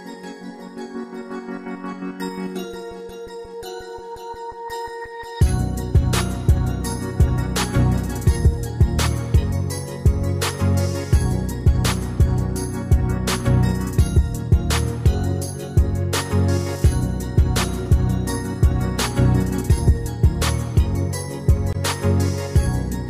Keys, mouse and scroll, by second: 1.4 Escape, 16.2 Escape.